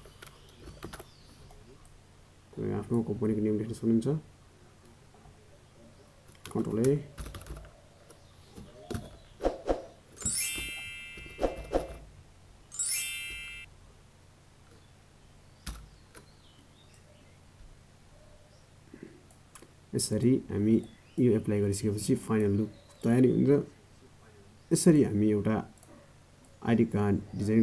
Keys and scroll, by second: 10.6 ctrl+a, 10.8 ctrl+z.